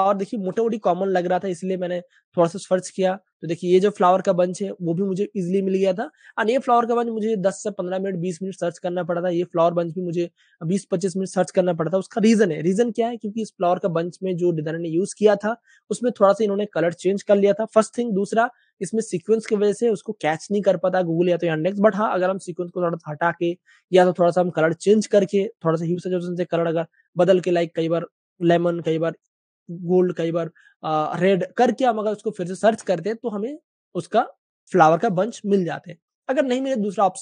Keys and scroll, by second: 6.8 typing, 15.8-16.5 typing, 33.0-33.8 typing.